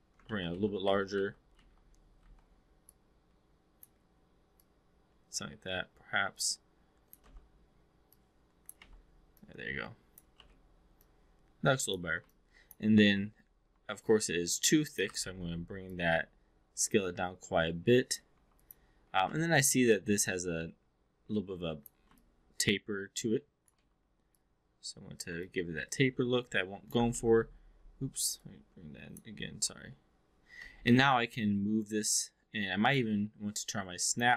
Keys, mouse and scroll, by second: 0.2 ctrl+z, 0.5 ctrl+z, 1.1 ctrl+z, 1.5 ctrl+z, 2.2 ctrl+z, 2.8-3.9 drag, 4.5-7.2 drag, 7.2 w, 8.2 click, 8.8 e, 9.3 click, 10.4 w, 11.0 click, 12.2-12.8 drag, 13.8-15.0 drag, 15.1 r, 15.8-18.2 drag, 18.3 3, 18.5 click, 19.1 e, 19.3 r, 20.2-21.9 drag, 22.1-23.7 alt+drag, 23.7 w, 24.3 click, 25.4-26.9 alt+drag, 27.1 ctrl+z, 28.3 click, 29.5 4, 30.5 w, 31.1-33.0 drag, 34.1 click.